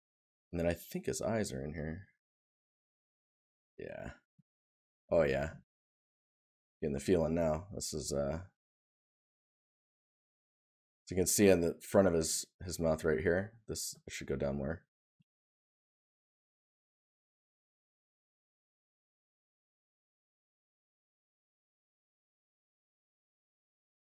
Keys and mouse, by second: 3.9 right click, 12.0 right click, 16.4 right click.